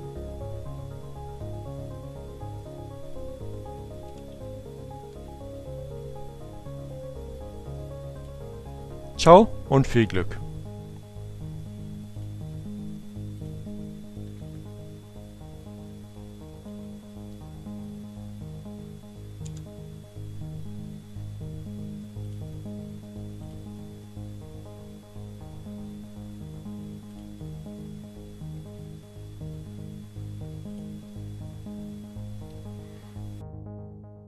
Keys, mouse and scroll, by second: 2.9 ctrl+-, 7.3 click, 11.2 click, 12.8 click, 13.1 Up, 14.3 Up, 18.2 Return, 21.3 click, 22.8 click, 25.8 click, 29.5 click.